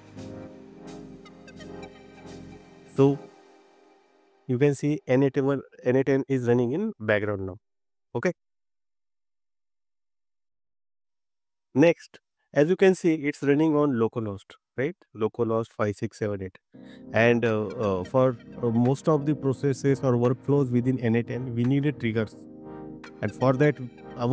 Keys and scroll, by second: 0.0 BackSpace.